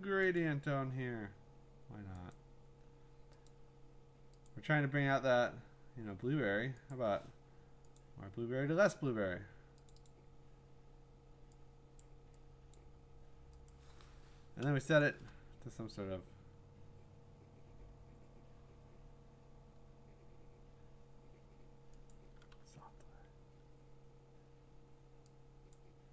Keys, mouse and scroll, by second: 0.4 click, 2.3 click, 3.5 click, 4.5 click, 5.0 scroll, 6.0-6.5 scroll, 6.9 click, 8.0 click, 9.9 click, 10.1 click, 12.0 click, 12.8 click, 13.7 click, 15.0 click, 17.7 click, 22.1 click, 25.8 click.